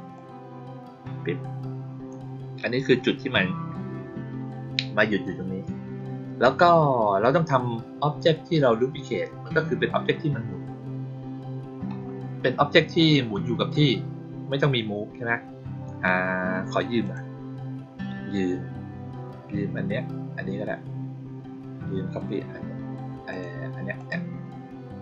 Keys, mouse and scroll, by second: 0.1-2.0 drag, 16.9 click, 23.2 click, 23.9 click.